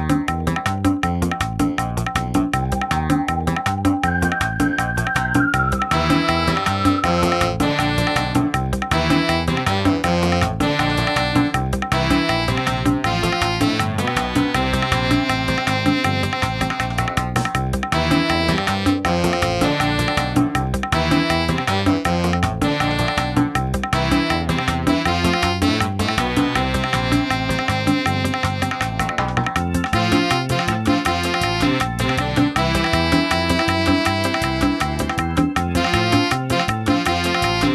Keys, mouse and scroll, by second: 0.5 ctrl+middle click, 1.0 middle click, 2.5 shift+middle click, 2.7 scroll up 2, 3.0 middle click, 3.6 shift+middle click, 3.8 scroll up 1, 5.1 click, 15.8 scroll up 1, 20.1 click, 20.3-20.8 scroll down 11, 20.8 middle click, 21.2 shift+middle click, 21.8 scroll up 2, 22.3 click, 23.1-23.6 scroll down 5, 25.4-26.2 scroll up 5, 25.6 middle click, 26.5 shift+middle click, 30.6 click, 33.9 click.